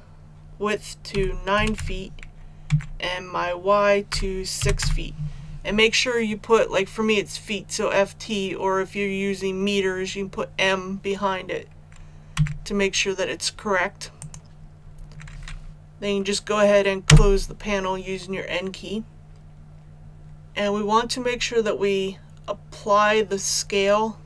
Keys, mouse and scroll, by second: 1.1-1.7 typing, 2.6 Tab, 4.0-4.8 typing, 12.3 Tab, 14.1 click, 17.0 n.